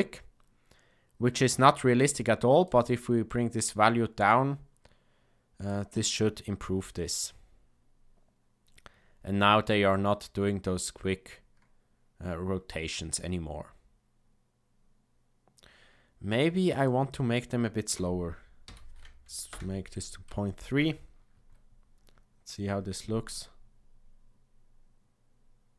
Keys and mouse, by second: 2.7-5.8 drag, 16.7-20.2 drag.